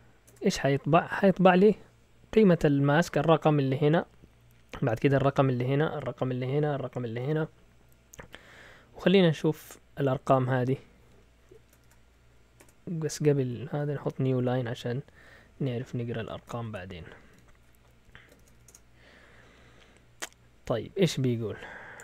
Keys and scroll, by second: 0.0-0.3 typing, 11.5 Escape, 11.8 shift+;, 12.6 BackSpace, 13.1 Left, 13.3 Left, 13.4 Left, 13.5 Left, 14.0-17.3 Left, 16.2-19.0 typing, 18.0 Escape.